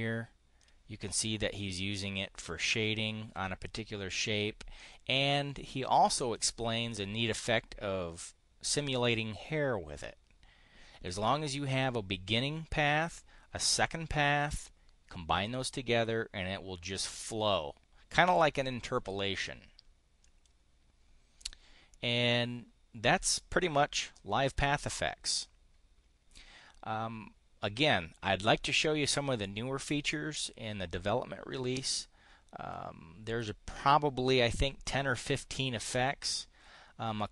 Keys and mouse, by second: 4.7-6.4 drag, 20.1 click, 21.3 click.